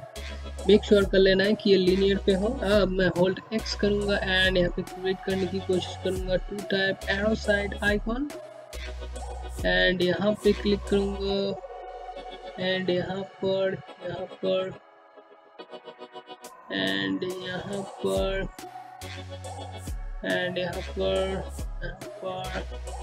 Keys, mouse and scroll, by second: 3.6-10.2 typing, 6.6 click, 7.5 click, 11.3 click, 11.4-13.3 typing, 11.8 click, 16.3 click, 16.5-23.0 typing, 18.3 click, 19.9 click, 22.3 click.